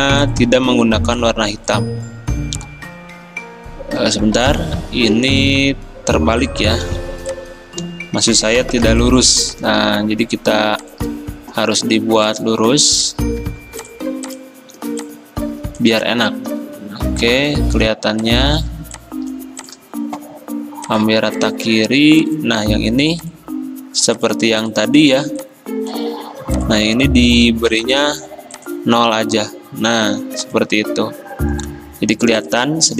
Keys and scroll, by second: 4.1 ctrl+z, 4.3 ctrl+z, 4.5 ctrl+z, 6.9 o, 8.9 v, 14.8 r, 16.5 v, 30.3 v.